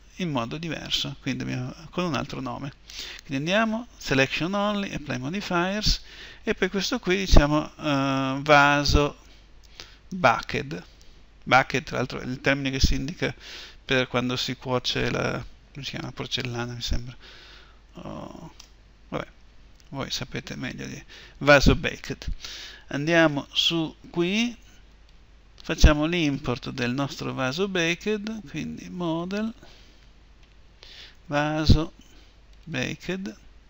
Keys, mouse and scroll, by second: 20.3 Return.